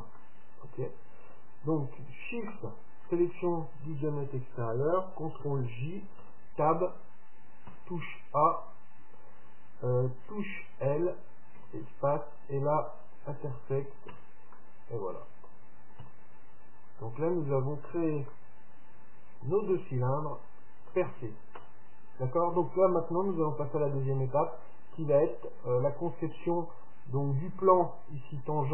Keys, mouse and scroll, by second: 0.3-2.2 middle drag, 2.6-4.3 right drag, 5.4 ctrl+j, 6.3 Tab, 7.8 a, 10.6 l, 11.7 space, 14.2 Tab, 14.6-16.5 middle drag, 16.1 KP_7, 16.8 middle click, 18.4-22.1 middle drag.